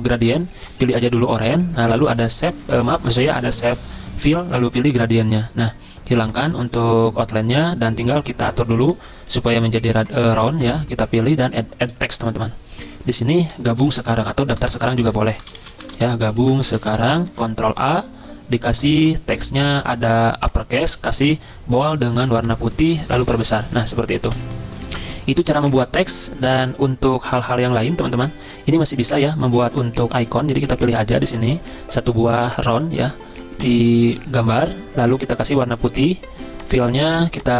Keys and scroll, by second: 13.6-19.7 typing, 15.0 Caps_Lock, 20.8-21.6 typing, 23.3 ctrl+], 23.4 ctrl+], 23.5 ctrl+], 23.6 ctrl+], 24.4 ctrl+[.